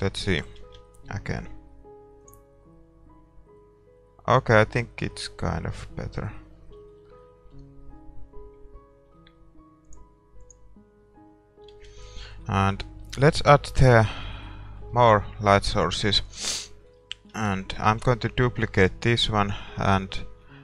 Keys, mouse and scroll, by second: 0.8-2.6 middle drag, 0.8 shift+z, 3.0-4.6 drag, 5.1-9.2 middle drag, 10.2-12.1 drag, 11.8 shift+z, 12.1-19.0 middle drag, 16.3-18.6 right drag, 17.9 shift+d, 18.6-20.6 drag.